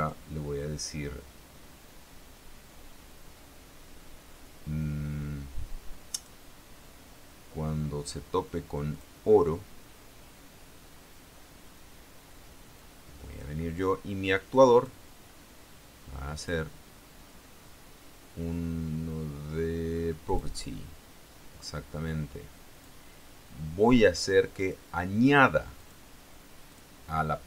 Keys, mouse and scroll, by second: 0.2 click, 6.3 click, 9.1 click, 12.9 click, 14.4 click, 16.5 click, 20.4 click, 21.8-23.2 drag, 24.8 click, 26.0 click, 26.9 click.